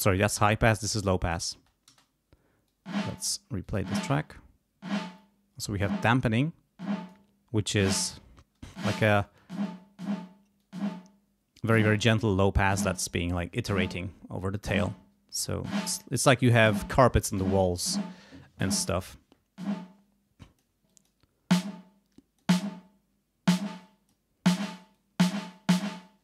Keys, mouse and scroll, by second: 0.0 click, 1.0 click, 1.5 space, 2.7 click, 3.6 click, 5.1 click, 6.8 click, 7.6 click, 9.2 click, 10.6 click, 15.3-16.4 drag, 20.4 click, 20.9 click, 21.5-22.6 drag, 23.6 click, 24.9 click.